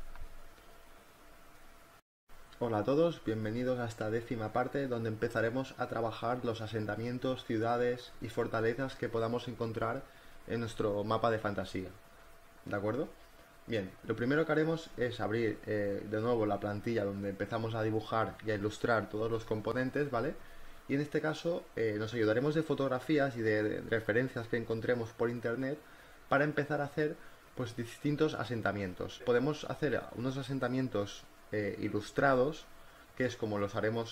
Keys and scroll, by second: 1.9 v, 2.1 space, 3.4 b, 4.9 space, 10.6 space, 25.9 e, 26.4 ctrl+t, 26.8 Return, 26.9 v, 27.3 b, 29.4 ctrl+z.